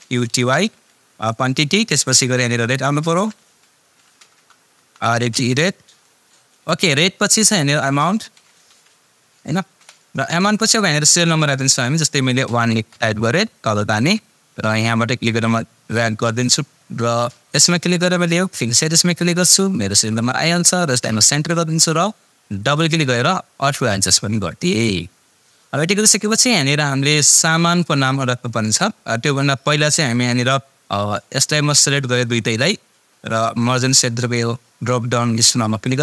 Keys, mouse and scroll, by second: 0.0-0.9 typing, 1.1 Tab, 2.7-6.4 typing, 7.6 shift+Num_Lock, 7.6-9.2 typing, 9.8 Return, 12.7 Return, 13.9-16.5 drag, 21.2 click, 27.3 click, 31.2-33.0 drag, 35.8 click.